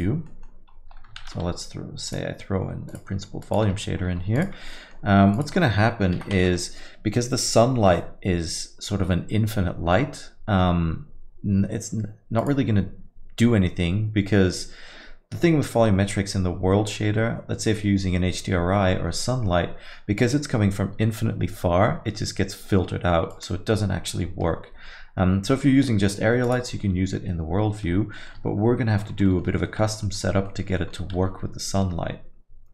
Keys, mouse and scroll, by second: 4.4 click, 5.3 click.